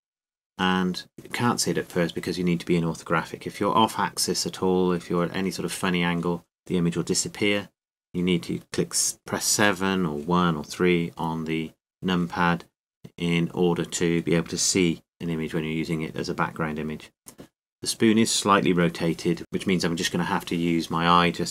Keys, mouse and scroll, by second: 1.9 KP_5, 4.0-5.3 middle drag, 7.0-8.8 middle drag, 9.8 KP_1, 12.3 KP_3, 13.4 KP_7.